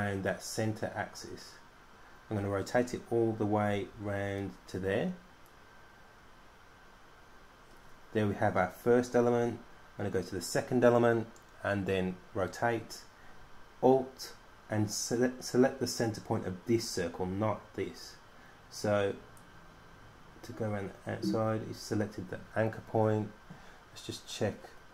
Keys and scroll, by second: 0.5 super+d, 0.6 super+d, 0.8 super+d, 0.9 super+d, 1.2 super+d, 1.4 super+d, 1.7 super+d, 2.2 super+d, 2.7 super+d, 3.1 super+d, 3.5 super+d.